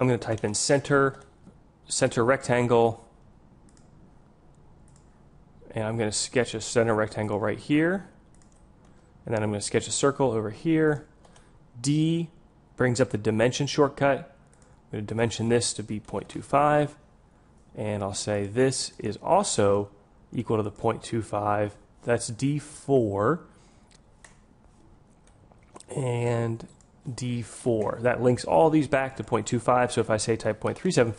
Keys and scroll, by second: 12.0 d.